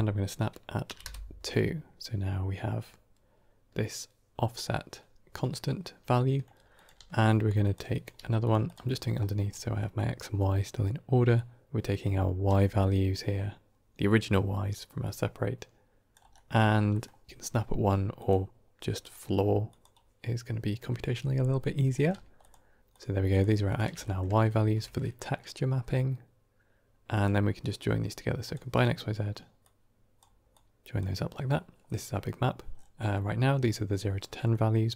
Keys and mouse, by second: 6.0-6.3 middle drag, 6.7 click, 6.9 shift+d, 7.9 click, 8.0 g, 8.5 click, 9.7 middle click, 11.2-16.0 drag, 16.2 middle click, 16.9 middle click, 18.0 drag, 18.9-19.7 drag, 21.9 middle click, 22.3 ctrl+shift+click, 22.8 ctrl+shift+click, 23.2 ctrl+shift+click, 23.5 ctrl+shift+click, 23.9 middle click, 24.5 shift+a, 29.5-30.1 drag, 30.4-30.9 drag, 32.9 middle click, 34.4 middle click.